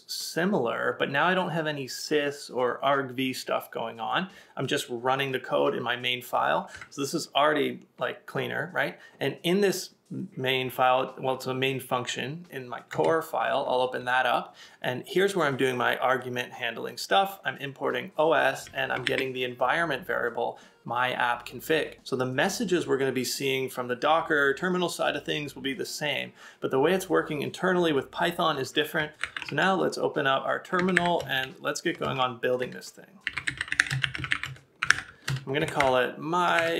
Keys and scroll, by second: 30.8 typing.